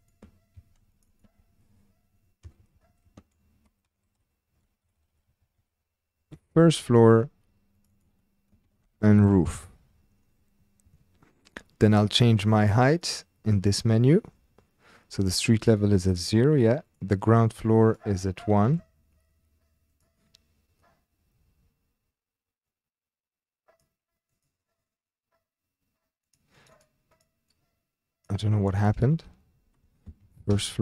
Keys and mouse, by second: 1.1-3.1 ctrl+drag, 2.6 Left, 2.7 Left, 3.0 Left, 3.2 ctrl+click, 4.5-6.8 ctrl+drag, 5.0 Delete, 5.1 Delete, 5.4 Delete, 5.5 Delete, 8.0-9.6 drag, 9.0 o, 11.7 click, 12.9-15.7 drag, 17.8 click, 20.0 click, 22.8-23.9 drag, 24.3 click, 26.5 click, 26.7-30.5 drag.